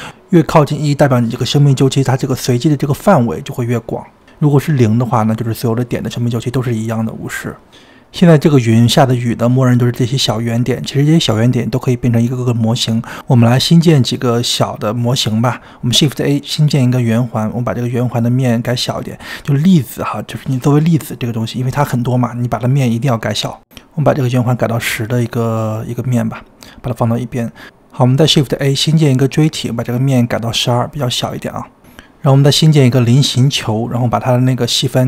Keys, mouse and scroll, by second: 3.6-6.1 drag, 6.1-6.9 scroll up 2, 6.9-8.6 shift+middle drag, 8.6 space, 9.7 space, 10.3-11.2 scroll up 4, 11.2 scroll down 2, 11.8 space, 12.2 click, 15.6 shift+a, 19.5-21.9 drag, 24.3-24.6 scroll up 2, 24.6 click, 25.0-25.7 scroll up 1, 25.7 click, 26.1 g, 27.3 ctrl+z, 27.5 shift+a, 31.0 click, 32.1 click, 32.3 g, 32.6 click, 32.8 shift+a, 34.9-35.0 drag.